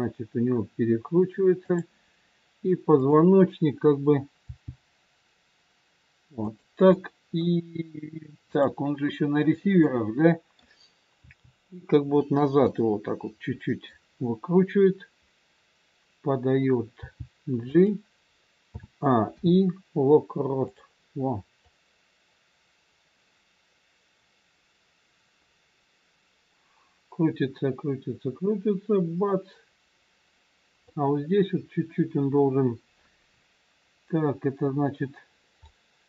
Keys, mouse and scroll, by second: 2.9 click, 4.4 g, 6.9 middle click, 8.4 click, 9.9 middle click, 11.2 g, 12.6 middle click, 16.9 g, 18.8 a, 19.3 i, 21.7 click, 35.6 middle click.